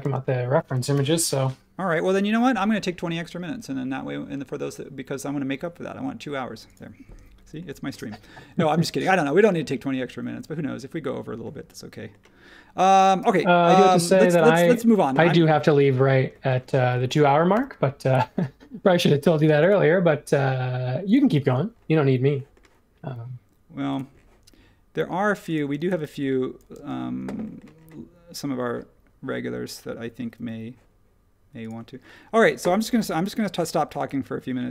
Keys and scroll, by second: 0.9 super+s, 21.4 ↺, 25.7-26.7 typing, 32.9 super+1.